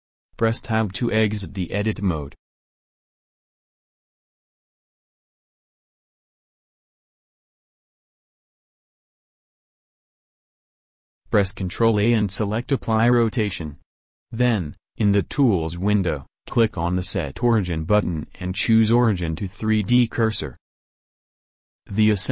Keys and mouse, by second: 9.2 Tab, 11.9 ctrl+a, 16.8-19.7 drag.